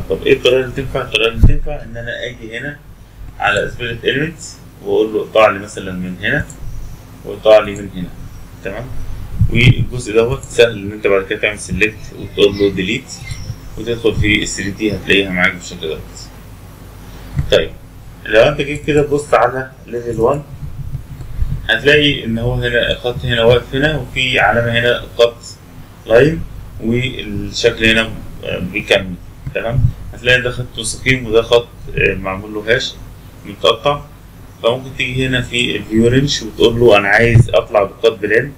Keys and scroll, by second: 9.3 Escape, 11.5 Delete.